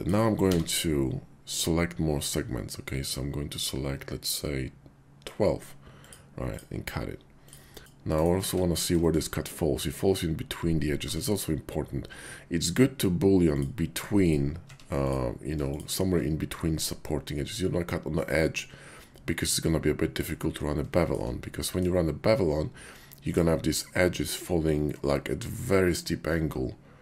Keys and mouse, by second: 0.5 b, 6.0 click, 6.5 click, 7.8 Tab, 7.8 ctrl+`, 8.4 Tab, 9.5 click, 11.0 Tab, 13.4 click, 14.6 Tab, 15.0 click, 15.6 shift+click, 21.0 shift+click, 21.5 click.